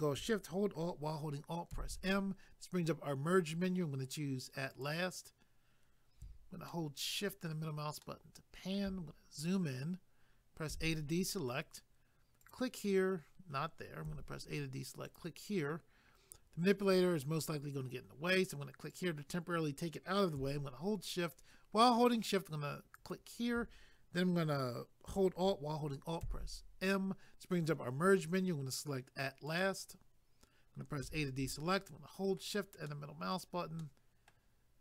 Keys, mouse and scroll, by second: 1.7 alt+m, 4.7 click, 6.7 shift+middle click, 8.0 shift+middle click, 9.1 scroll up 1, 12.4 click, 15.1 click, 18.9 click, 22.9 shift+click, 29.5 click, 31.0 a, 31.7 shift+middle click, 32.9 shift+middle click, 33.8 shift+middle click.